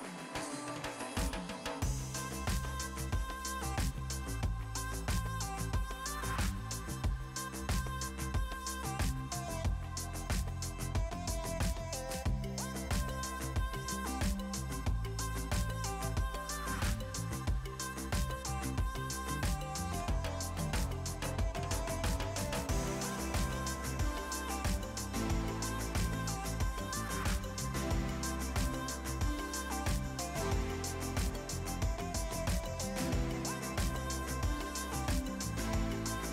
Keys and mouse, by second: 0.0 click, 0.1-1.5 typing, 1.7 click, 3.4 click, 3.7 Escape, 4.2 click, 5.4 click, 5.9 click, 6.3 click, 7.2 x, 7.4 Return, 8.5 click, 9.2 click, 10.2 x, 10.4 Return, 10.9 click, 13.6 ctrl+x, 13.8 click, 14.4 KP_2, 15.4 Return, 16.3 click, 18.0 right click, 18.3 click, 18.4 right click, 18.7 click, 19.8 click, 19.9 right click, 20.1 click, 21.4 h, 22.4 Return, 22.8 click, 23.7 click, 24.4 right click, 24.6 click, 24.8 right click, 25.1 click, 26.2 Delete, 26.6 click, 28.2 right click, 28.4 click, 29.1 click, 30.7 x, 31.0 Return, 31.9 click, 32.5 click, 34.4 right click, 34.7 click, 35.1 right click, 35.4 click.